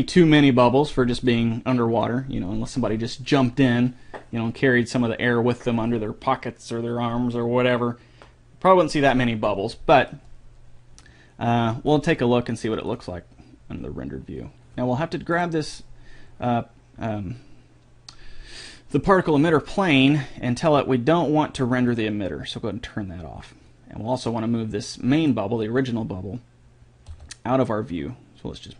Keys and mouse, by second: 1.9 click, 2.9-3.9 drag, 12.3-14.0 drag, 15.8-17.5 right drag, 19.4-21.0 right drag, 21.0-22.4 middle drag, 22.4-24.1 drag, 24.7-26.3 right drag, 26.3-27.4 drag, 27.5 g.